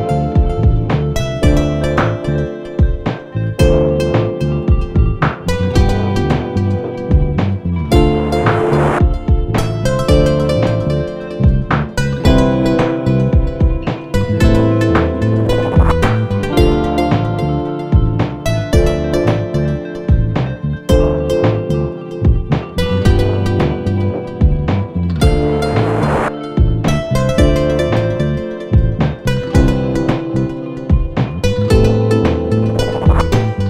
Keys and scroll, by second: 13.2 ctrl+a, 14.8 Return, 20.0 u, 21.7-22.9 typing, 27.6 s, 29.3-30.8 typing, 31.6 F8, 31.9 F9.